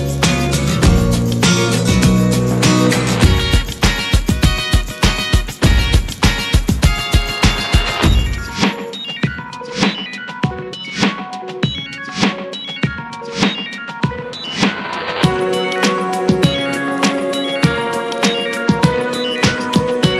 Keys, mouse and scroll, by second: 0.3 ctrl+1, 0.5 drag, 0.9-2.7 middle drag, 2.7 click, 3.3 Delete, 4.0-8.6 drag, 9.8-11.7 drag, 11.9-12.3 scroll up 1, 12.3-12.7 middle drag, 12.7 click, 13.2 ctrl+1, 13.3 drag, 13.7-14.5 middle drag, 14.5-14.9 scroll up 2, 14.7 shift+middle click, 15.3-15.7 drag, 15.7 middle drag, 15.9 scroll up 1, 16.2-16.9 shift+middle drag, 16.9 scroll up 2, 17.4-19.0 middle drag, 19.0-19.3 scroll down 3, 19.3-20.1 shift+middle drag.